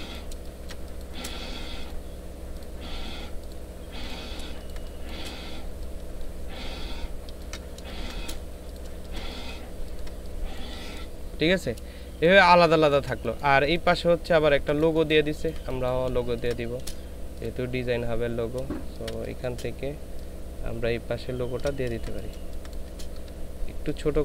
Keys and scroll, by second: 0.3 ctrl+space, 4.5 ctrl+space, 5.5 ctrl+alt+space, 6.2 ctrl+alt+shift+space, 7.7 ctrl+alt+shift+space, 8.9 ctrl+space, 9.8 ctrl+space, 12.1 ctrl+space, 12.8 ctrl+space, 13.6 ctrl+space, 14.5 ctrl+space, 15.1 ctrl+space, 16.2 ctrl+space, 18.8 ctrl+space, 20.3 ctrl+alt+space, 21.8 space.